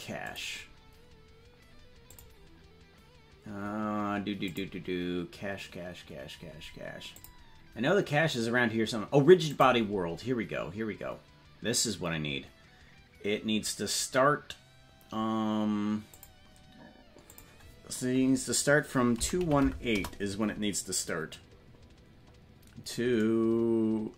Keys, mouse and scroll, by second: 0.4 click, 2.1 click, 4.6 click, 7.3 click, 9.5 click, 16.1 click, 17.4-20.4 drag.